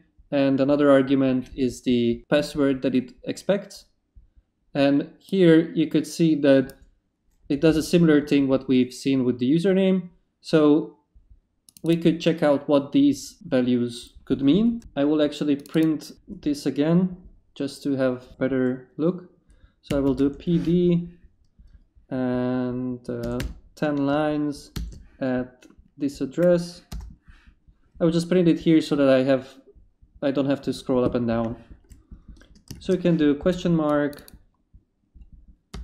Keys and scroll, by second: 19.6-20.6 typing, 23.4 0, 24.1 shift+0, 24.7 shift+2, 26.9 Return, 33.4 shift+space, 34.0 space, 35.7 Return.